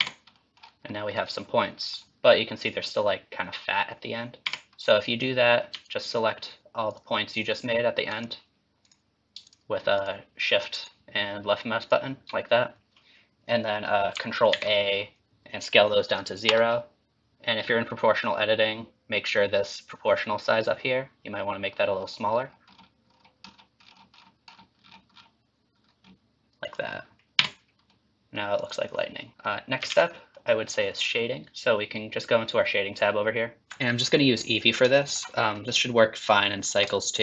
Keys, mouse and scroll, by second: 0.0 Tab, 0.4 middle click, 0.9 middle click, 4.5 Tab, 5.8 ctrl+click, 7.0 ctrl+click, 8.2 click, 8.9 click, 9.5 shift+click, 10.0 click, 10.8 click, 11.9 click, 14.5 ctrl+a, 27.4 Tab, 27.9 middle click, 28.6 click, 29.0 middle click, 29.3 middle click, 29.9 alt+z, 30.1 middle click, 30.5 middle click, 33.6 middle click, 35.0 shift+middle click, 35.4 scroll up 2, 35.7 middle click, 36.6 scroll down 2, 37.1 shift+middle click.